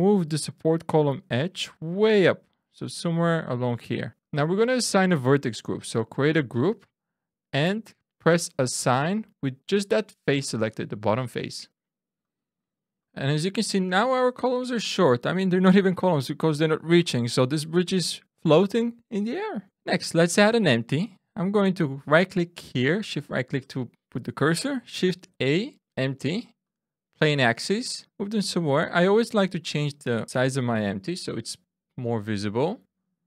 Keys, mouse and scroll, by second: 0.7 click, 4.1 click, 6.2 click, 12.1 click, 13.0 Tab, 13.0 click, 13.0 middle click, 13.0 scroll down 3, 14.0-14.7 scroll up 3, 14.9 shift+middle click, 19.7 shift+middle click, 19.7-20.1 shift+scroll down 1, 20.1-20.8 scroll up 1, 22.2 shift+right click, 24.9 shift+a, 28.0 click, 29.7 click.